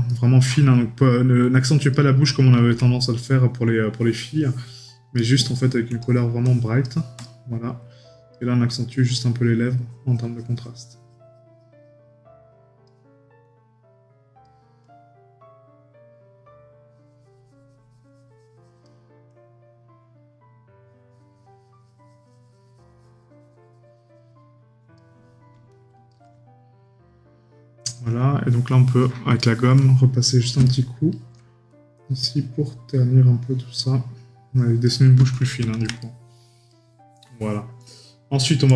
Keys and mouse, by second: 5.2 right click, 30.6 right click, 36.0 right click.